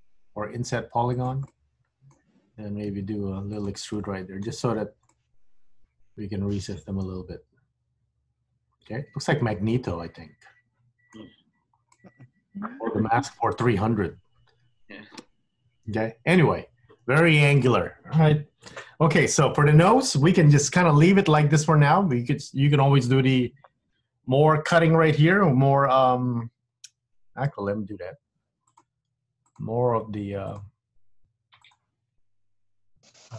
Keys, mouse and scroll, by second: 1.7 middle click, 2.9 e, 4.1 middle click, 4.8 Tab, 5.2 middle click, 11.3-11.7 scroll up 3, 11.7-14.3 scroll down 5, 12.0 middle click, 17.8 scroll down 1, 18.0-18.8 scroll up 4, 18.8-19.5 scroll down 2, 19.5 middle click, 20.7 Tab, 21.4-21.7 scroll up 1, 21.7 middle click, 27.5 k.